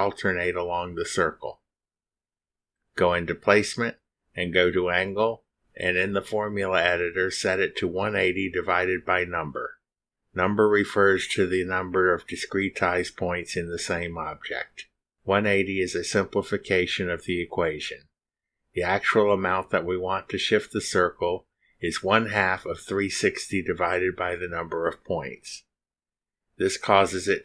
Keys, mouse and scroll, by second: 0.9 click, 7.2 click, 10.3 click, 13.2 click, 15.3-17.3 typing, 19.4 shift+n, 21.6 u, 22.6 Down, 23.1 Return, 24.4 Return, 26.6 click.